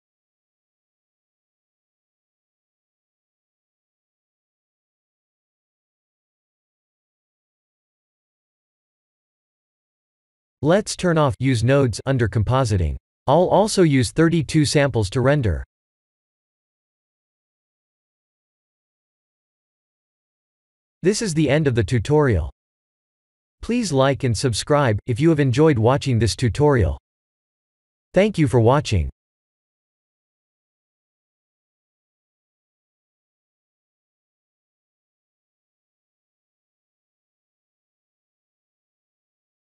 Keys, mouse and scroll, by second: 0.7 click, 1.6 click, 10.2 click, 12.5 click, 13.1 click, 14.7 click, 15.7 click, 17.3 click, 19.2 ctrl+s.